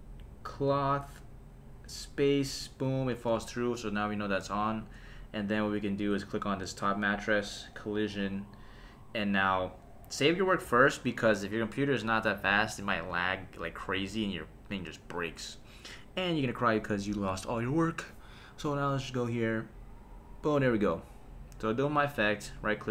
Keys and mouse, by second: 0.7 click, 1.8 space, 3.1 space, 4.6 shift+Left, 6.2 click, 7.6 click, 10.7 super+s, 14.9 click, 18.7 space, 20.8 space, 22.5 right click.